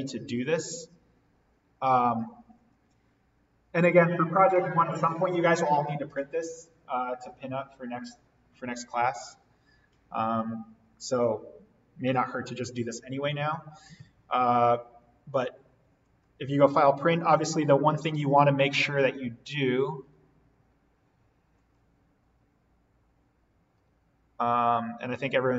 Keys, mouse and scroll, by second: 16.0 click, 21.5 click.